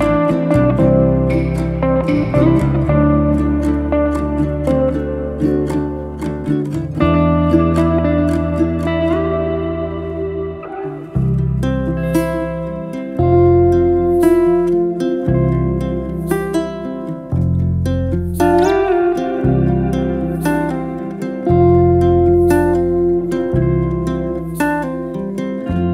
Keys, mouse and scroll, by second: 0.0 shift+click, 0.5 shift+click, 0.9 shift+click, 1.4 shift+click, 1.8 shift+click, 2.1 shift+drag, 3.1 ctrl+x, 12.5-13.4 scroll down 1, 13.4-14.5 middle drag, 14.5 e, 17.0 scroll down 4, 17.3-17.8 middle drag, 17.8 Tab, 18.1-18.8 middle drag, 18.8 drag, 19.1-19.9 middle drag, 19.9 drag, 20.9 s, 22.0-23.6 middle drag, 24.5 s.